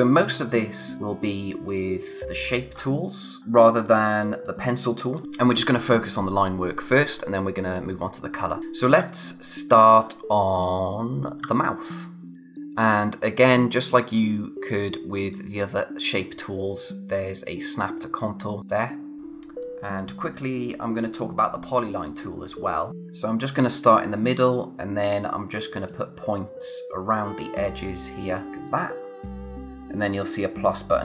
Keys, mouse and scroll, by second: 1.7 click, 2.8-3.7 scroll up 1, 3.7 space, 3.9 click, 4.2 space, 4.4 click, 9.0-10.5 scroll up 1, 10.5 click, 11.4 space, 11.9 click, 11.9 space, 12.5 click, 18.6 click, 19.2-19.6 scroll up 1, 19.6 click, 21.7-22.1 scroll down 1, 22.3 space, 22.5 click, 22.8 space, 23.4 click, 25.8 click, 27.8 click, 28.7 click.